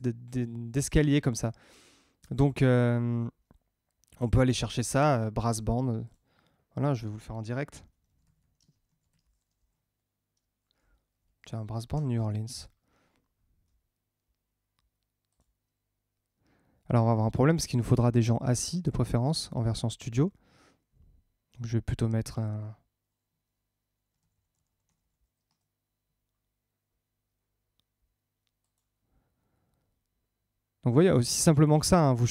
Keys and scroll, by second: 8.5 space, 11.0 Down.